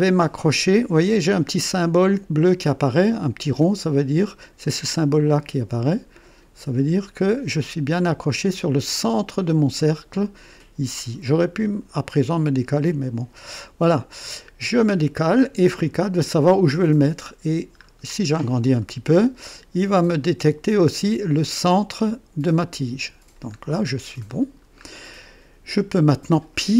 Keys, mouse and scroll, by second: 12.1 click, 13.8 right click, 17.8-18.4 scroll up 1, 18.7-19.1 scroll up 1, 22.5 click, 23.5-24.9 scroll down 4.